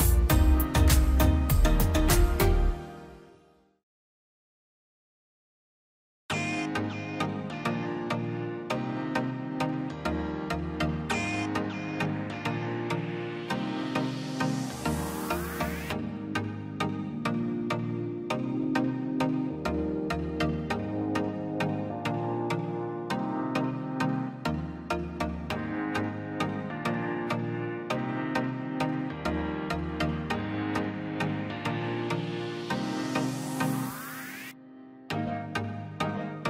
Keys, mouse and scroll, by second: 0.1 click, 0.7 scroll up 1, 1.1 click, 1.8 scroll up 1, 2.1 click, 2.2 click, 2.9-3.6 scroll down 1, 3.8 click, 4.1 scroll down 1, 4.6 middle click, 5.0-5.3 scroll down 1, 5.3 middle click, 5.7 scroll up 1, 6.0 middle click, 6.5 scroll up 1, 8.2 click, 8.3-8.9 scroll down 2, 8.4 click, 8.9 middle click, 9.7 click, 9.8-10.3 scroll up 1, 10.3 click, 10.6-11.4 scroll up 1, 11.4 click, 11.6 scroll down 1, 11.8 middle click, 12.2 scroll up 1, 12.8 click, 14.0 scroll down 1, 15.0 click, 16.6 click, 18.1 ctrl+s, 19.1-19.5 scroll down 1, 19.5 middle click, 19.8 scroll up 1, 21.9 scroll down 1, 26.7 click, 26.9 Escape, 27.5 l, 27.8 scroll down 1, 29.2 click, 30.8-31.5 scroll down 1, 31.8-32.9 typing, 33.1 scroll up 1, 34.1 click, 34.5-34.8 scroll down 1, 35.6 l.